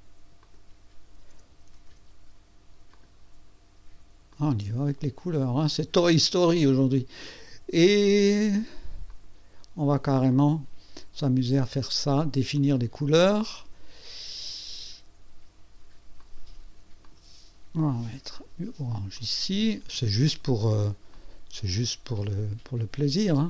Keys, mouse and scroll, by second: 0.4 click, 1.7 ctrl+d, 2.9 click, 4.3 click, 5.2 click, 5.7 click, 7.3 click, 9.1 click, 10.3 click, 11.6 right click, 12.5 click, 16.2 click, 17.0 click, 18.3 click, 19.1 click, 21.1 click.